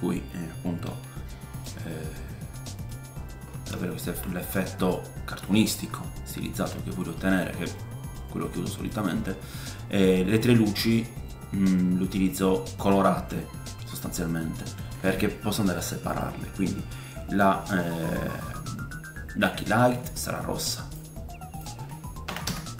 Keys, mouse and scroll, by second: 0.0 middle click, 0.8 r, 2.3-8.9 middle drag, 3.1-3.8 scroll up 4, 4.3-4.9 scroll down 2, 5.9-6.3 scroll up 2, 16.1 click, 19.4 click.